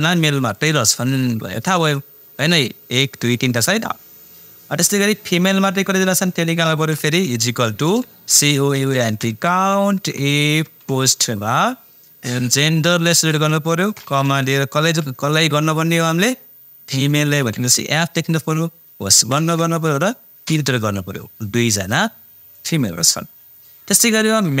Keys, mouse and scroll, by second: 0.5 click, 5.0 click, 7.4-10.6 typing, 12.6-14.2 drag, 14.2 ,, 14.8 shift+', 17.0 shift+f, 17.4 shift+', 19.2 shift+0.